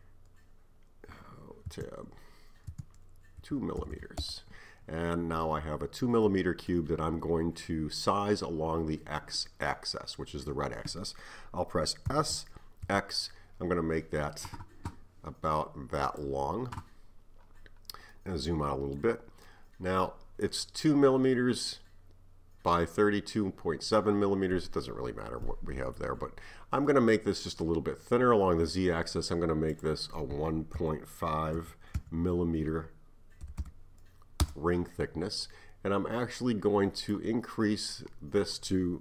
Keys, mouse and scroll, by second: 4.0 m, 5.5-6.3 scroll up 4, 6.3-9.3 middle drag, 12.1 s, 17.6 scroll down 2, 18.2-22.5 middle drag, 25.5-29.7 middle drag, 29.7-32.8 drag, 33.6 m, 37.0-39.0 drag.